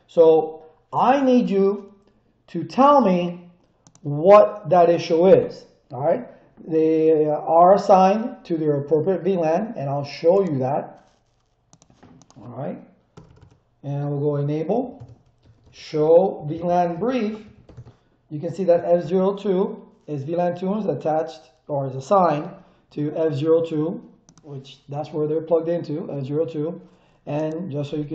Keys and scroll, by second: 13.1 Return, 14.6-17.6 typing, 14.9 Return, 17.7 Return.